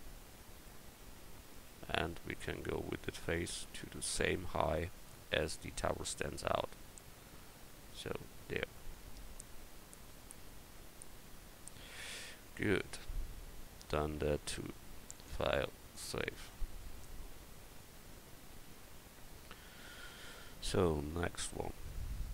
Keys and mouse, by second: 1.7 Tab, 2.5-6.8 right drag, 5.3-8.9 drag, 9.4 Tab, 12.4 a, 16.6-17.0 middle drag, 22.2 KP_1.